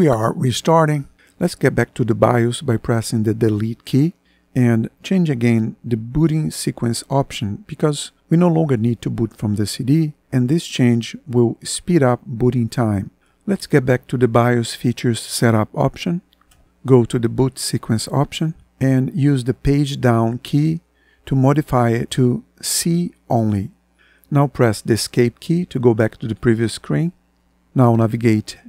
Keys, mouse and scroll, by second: 2.8 Delete, 14.3 Down, 15.6 Return, 16.7 Down, 19.8 Page_Down, 25.2 Escape, 27.3 Right, 28.4 Down.